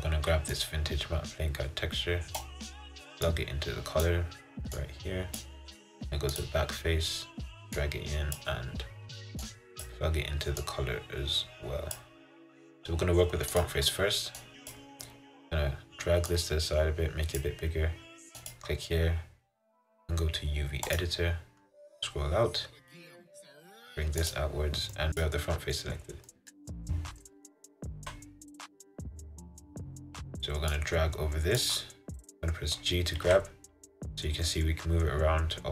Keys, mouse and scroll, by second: 2.5 click, 4.2-6.8 drag, 9.0 click, 12.1-13.8 drag, 16.6-18.4 drag, 21.2-25.1 drag, 26.5-28.1 middle drag, 28.1 KP_7, 31.7-33.4 drag, 33.4 g.